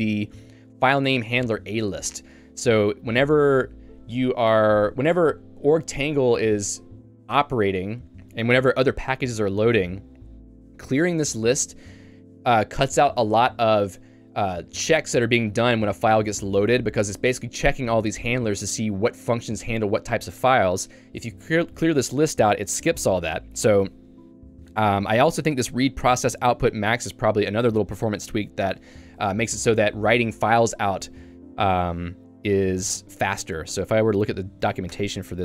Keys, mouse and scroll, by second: 24.5 Escape, 25.1 j, 25.8 shift+v, 27.4 Escape, 32.8 h, 33.0 h, 35.0 Return.